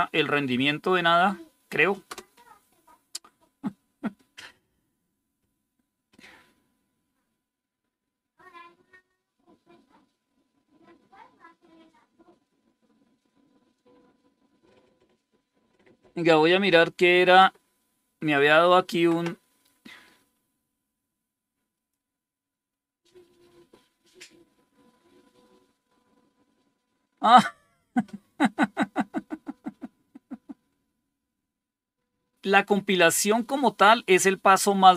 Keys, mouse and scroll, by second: 2.0 Return, 21.6 click.